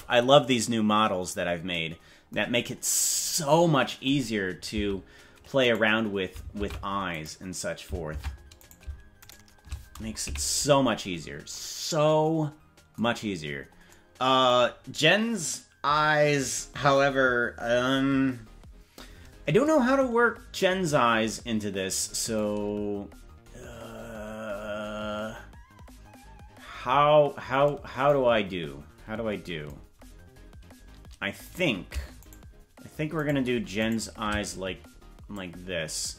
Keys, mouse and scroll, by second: 2.6-3.2 scroll down 8, 5.6 right click, 6.5 ctrl+Tab, 7.1 right click, 8.0 ctrl+Tab, 8.6 right click, 9.4 shift+right click, 10.2 KP_Decimal, 11.2 scroll down 6, 31.5 right click, 32.3 shift+right click, 33.3 right click, 35.3-36.1 drag.